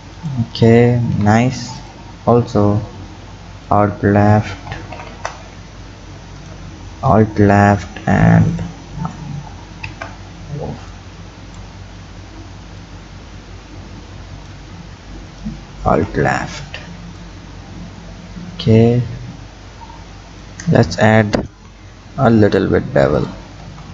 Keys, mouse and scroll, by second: 0.2 click, 1.1 Tab, 1.8 alt+click, 3.7 alt+shift+click, 5.0 ctrl+z, 5.1 ctrl+z, 6.4 alt+click, 8.5 alt+shift+click, 9.9 ctrl+z, 10.9 click, 11.8-12.3 scroll down 3, 12.8-15.4 drag, 17.2-20.2 drag, 21.5 ctrl+b, 23.6 Tab.